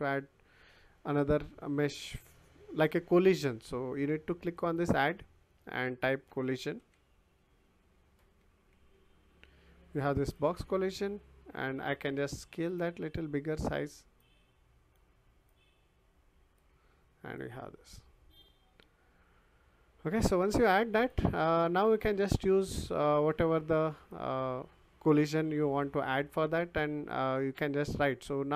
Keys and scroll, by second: 6.3 c, 6.8 o, 8.4 l.